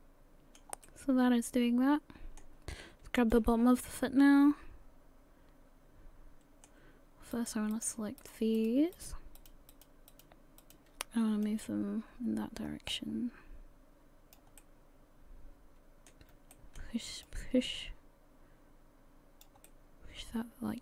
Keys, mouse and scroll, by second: 0.8 middle click, 3.2 click, 3.6-4.2 scroll up 5, 4.1 middle click, 7.3 right click, 7.7 shift+right click, 8.2 shift+right click, 8.6 shift+right click, 9.0 shift+right click, 9.4 shift+right click, 10.1 shift+right click, 10.6 shift+right click, 11.4 click, 14.6 middle click, 16.5 shift+middle click, 17.2 click, 20.3 middle click.